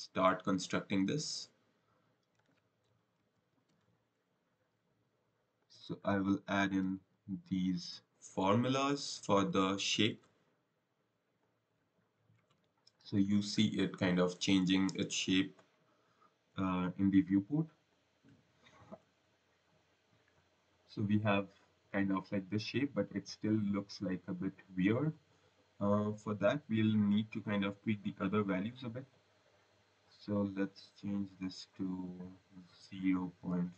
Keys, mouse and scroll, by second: 4.2-5.3 scroll, 5.5 click, 11.3 click, 17.8 click, 20.0 click, 24.7 click, 29.1-29.5 scroll, 30.6 click, 32.1 click.